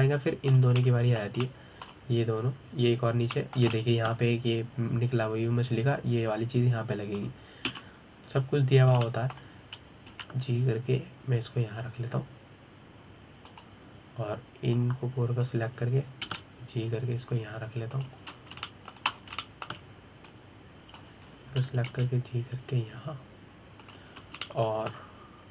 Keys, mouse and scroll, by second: 0.4-8.4 middle drag, 9.3 KP_7, 10.5 scroll down 2, 10.7-11.7 shift+middle drag, 11.7 g, 16.4 click, 17.9 g, 20.0-20.3 scroll down 2, 20.3 shift+middle click, 20.8 scroll up 2, 21.1 shift+middle click, 21.9 click, 23.6 g.